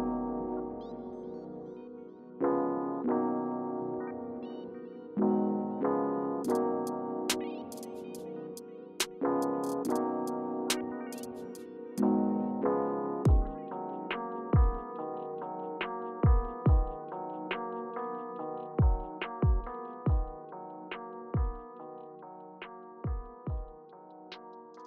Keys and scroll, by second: 0.5-1.2 typing.